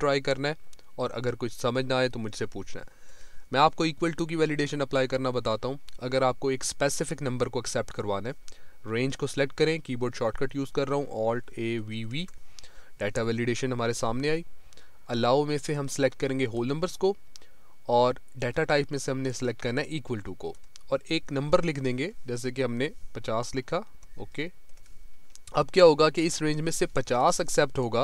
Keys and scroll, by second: 3.1 Right, 11.5 alt+a, 11.8 alt+v, 27.6 Down.